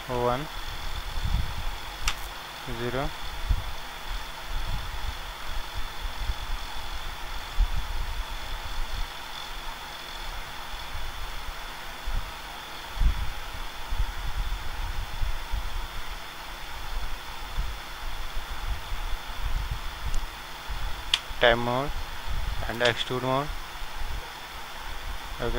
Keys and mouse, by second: 0.1 KP_1, 2.1 ctrl+alt+KP_1, 4.4-6.3 drag, 6.3 middle click, 6.6 click, 7.5 ctrl+z, 11.3 KP_0, 18.6-19.8 middle drag, 19.3-21.1 drag, 21.1 Tab.